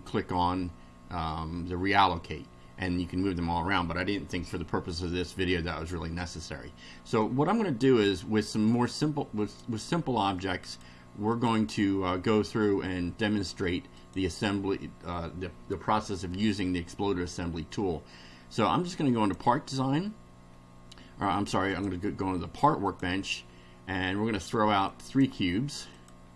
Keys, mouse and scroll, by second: 4.2-5.4 middle drag, 8.5-9.7 drag, 10.6 click, 11.3 click, 14.0 click, 19.2 click, 21.7 click, 22.9 click, 24.9 click, 26.0 click.